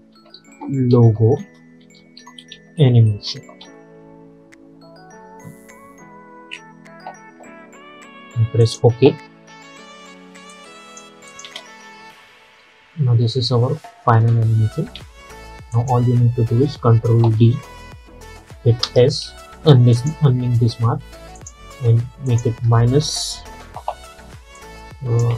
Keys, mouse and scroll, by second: 0.0-4.2 typing, 8.7 click, 11.5 space, 15.0 space, 15.8 click, 17.5 ctrl+d, 18.9 s, 20.0 click, 24.7-25.3 drag.